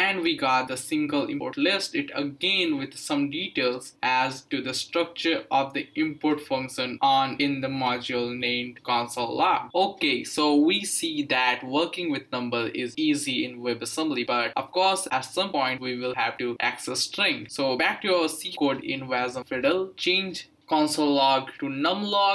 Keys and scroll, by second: 20.8-22.3 typing.